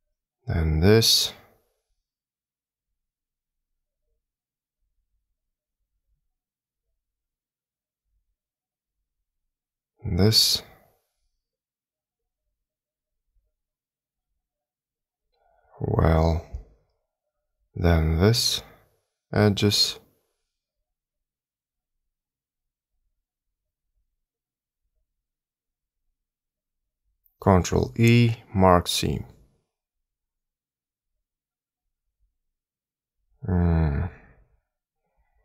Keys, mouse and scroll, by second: 1.1 shift+click, 1.7 shift+click, 2.4 shift+click, 3.0 shift+click, 3.8 shift+click, 5.0 shift+click, 6.0 shift+click, 7.2 shift+click, 9.0 shift+click, 9.7 shift+click, 10.6 shift+click, 11.5 shift+click, 12.2 shift+click, 12.9 shift+click, 15.4 scroll up 1, 16.1 middle click, 18.0 shift+click, 19.6 shift+click, 20.9 shift+click, 22.0 shift+click, 22.9 shift+click, 23.8 shift+click, 24.4 shift+click, 25.0 shift+click, 28.0 ctrl+e, 32.2 middle click, 34.0-35.4 scroll down 2.